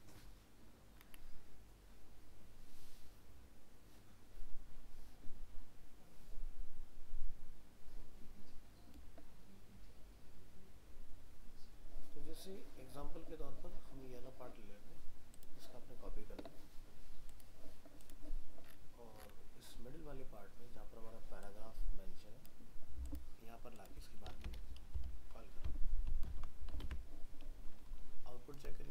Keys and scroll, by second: 25.0 ctrl+v, 26.8 alt+Tab.